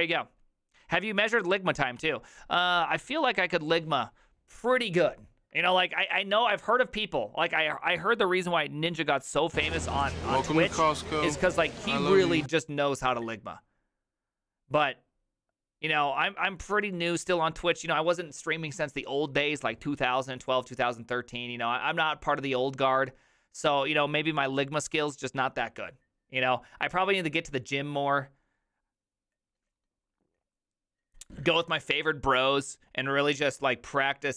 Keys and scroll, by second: 1.7 h, 2.0 alt+f.